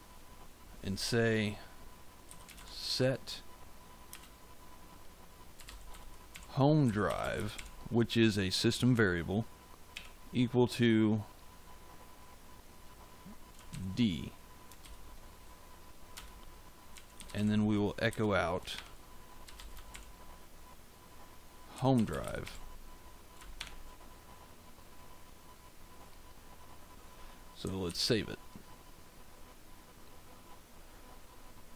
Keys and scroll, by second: 2.0-3.0 typing, 4.0 space, 5.2-8.0 typing, 9.9 =, 13.6 shift+d, 14.7 shift+;, 16.1 Return, 16.6-20.3 typing, 21.4-23.5 typing, 27.8 ctrl+s.